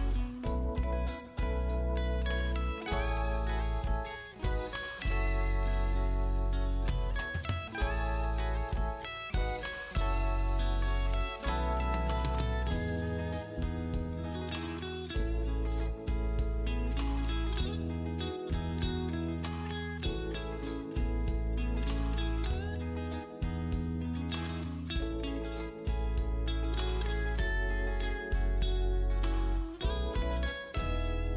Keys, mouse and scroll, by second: 0.5 space, 1.9 click, 3.1 click, 6.4 space, 6.6 click, 22.8 scroll up 1, 23.7 click, 24.7 scroll down 1, 25.7-26.6 scroll up 1, 27.9 click, 29.1 scroll down 1, 30.5-30.8 scroll up 1.